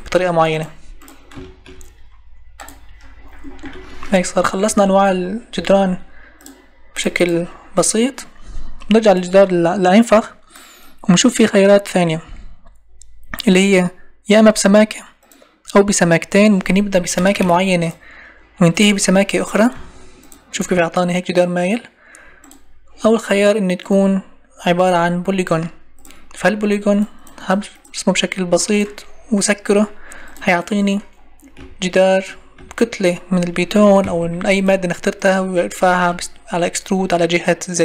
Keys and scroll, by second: 4.7 Escape, 34.2 Escape.